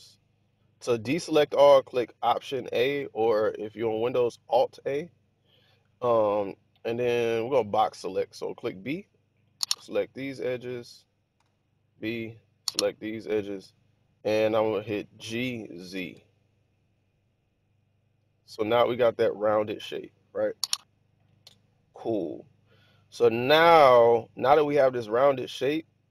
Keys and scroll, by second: 2.5 alt+a, 7.5 b, 11.3 b, 15.1 g, 16.1 z.